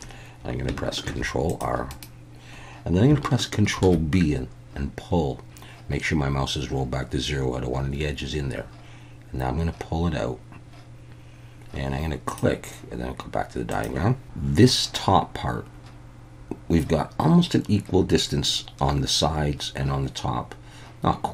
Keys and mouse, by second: 1.0 ctrl+r, 1.9 right click, 3.8 ctrl+b, 12.3 click.